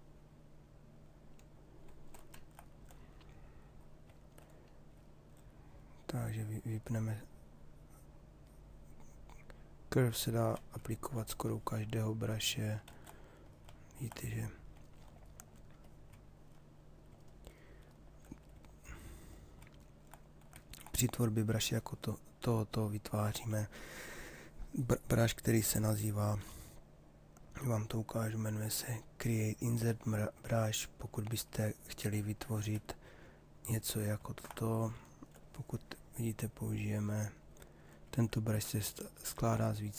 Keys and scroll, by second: 12.5 ctrl+z, 25.1 shift+f, 32.4 b, 35.4 ctrl+z.